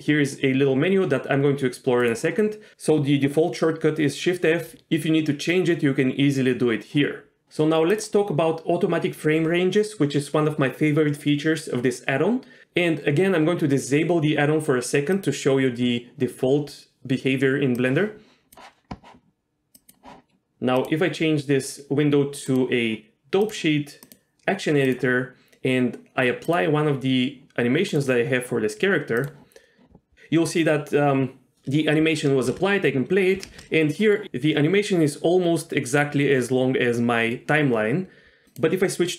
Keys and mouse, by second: 19.8 click, 20.8-21.7 drag, 21.9 click, 22.5-23.5 drag, 24.1-24.9 drag, 26.4-27.8 drag, 27.9-29.3 drag, 32.3 shift+space, 33.5 shift+space, 38.5 click.